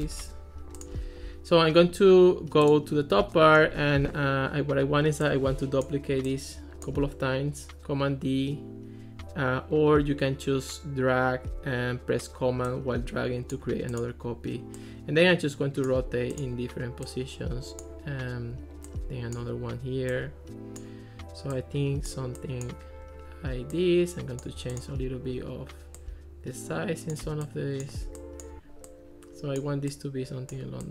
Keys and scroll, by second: 0.1 Escape.